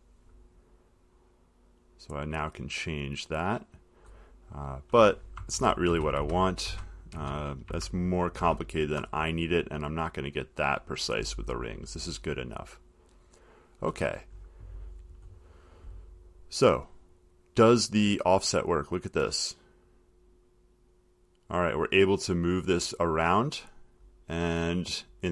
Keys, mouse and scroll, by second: 0.1 click, 3.7 click, 5.7 ctrl+z, 6.1 ctrl+z, 10.6 click, 24.2 click.